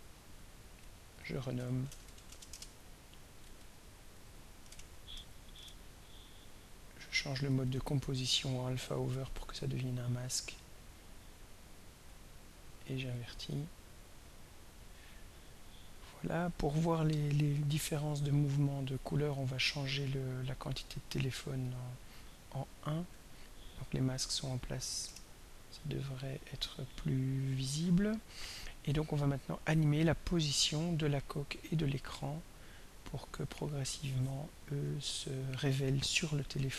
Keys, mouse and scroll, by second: 0.7 click, 1.5 Home, 1.6-2.6 typing, 3.4 click, 4.1 click, 4.6 BackSpace, 5.1 Right, 5.3 k, 5.5 Return, 7.2 click, 8.2 click, 9.1 click, 9.7-11.3 scroll down 4, 11.9 click, 13.1 click, 14.2 click, 17.1 click, 20.2 click, 21.0 click, 21.6 click, 23.1 1, 25.0 Return, 30.5 click, 32.5 click, 35.2 click, 36.5 click.